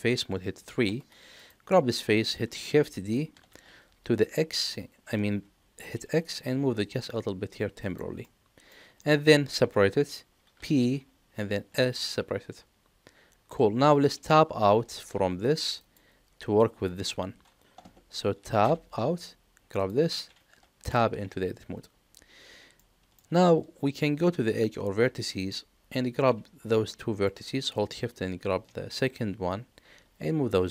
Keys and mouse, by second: 0.6 3, 1.7 middle click, 3.4 shift+d, 8.2 middle click, 8.9 middle click, 11.8 p, 18.6 Tab, 19.7 click, 20.8 Tab, 22.7 middle click, 25.4 click, 26.2 click, 26.9 shift+click, 29.4-30.7 drag.